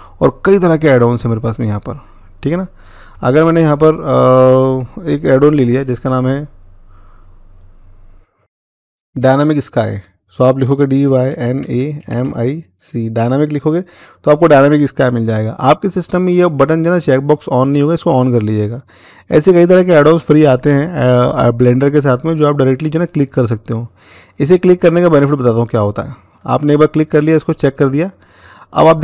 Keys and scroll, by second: 10.4-11.9 typing.